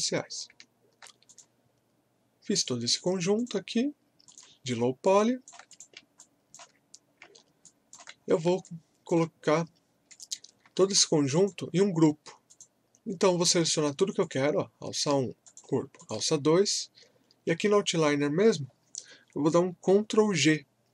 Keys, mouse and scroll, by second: 1.3 click, 5.1 alt+click, 6.2 alt+click, 7.3-7.6 alt+scroll down 1, 7.6 alt+click, 8.2 scroll up 1, 8.6-10.1 alt+drag, 13.1 scroll up 1, 14.2 click, 15.4 ctrl+click.